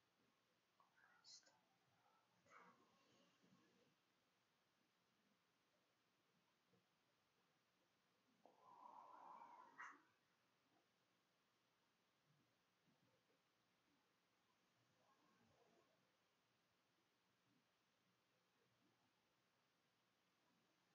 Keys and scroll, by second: 17.3 -, 17.5 ], 17.6 \, 17.8 Return, 18.5 Return, 20.0 l.